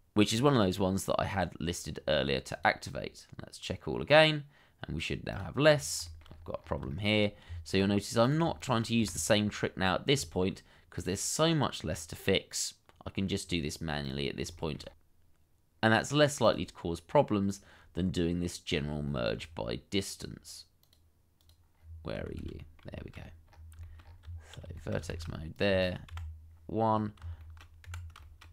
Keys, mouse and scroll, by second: 0.1-0.5 scroll down 1, 0.6 shift+middle click, 5.6-6.0 scroll down 1, 6.0 shift+middle click, 6.2-6.6 scroll up 1, 6.9 shift+middle click, 7.1-7.5 shift+scroll up 1, 7.5 Tab, 8.6 shift+click, 9.0 1, 9.5 scroll down 1, 10.3 shift+middle click, 10.4 shift+scroll down 1, 14.1 scroll down 1, 14.6 shift+middle click, 14.8 scroll up 1, 15.5-16.0 scroll up 1, 16.0 Tab, 16.8 shift+click, 17.2 1, 19.4-20.0 scroll down 1, 20.0 middle click, 21.7-22.2 scroll down 1, 22.3 shift+z, 22.6 middle click, 23.1 scroll up 1, 23.8 shift+middle click, 24.0 shift+scroll up 1, 24.2 Tab, 24.7 shift+middle click, 25.1 shift+z, 25.8 shift+click, 26.1 2, 26.8-27.2 scroll down 1, 27.4 shift+middle click, 27.8 Escape.